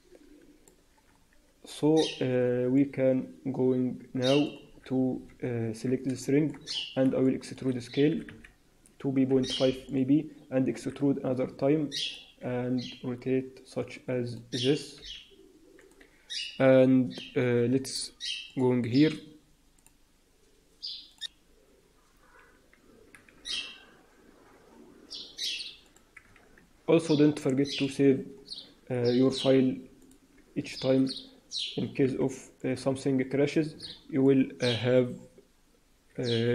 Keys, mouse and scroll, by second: 1.3 scroll down 2, 1.6-2.1 scroll up 1, 2.1 scroll up 3, 2.7 middle click, 3.5 middle click, 4.6-5.2 scroll up 1, 5.2-6.1 scroll up 3, 5.2 KP_1, 6.1 shift+middle click, 6.6-7.0 scroll up 2, 7.1 shift+middle click, 8.0 e, 10.7 e, 12.3 r, 26.2 click, 26.4 ctrl+s, 27.7 click, 28.8-29.3 scroll up 2, 29.9 click, 30.7 alt+a, 32.0 c.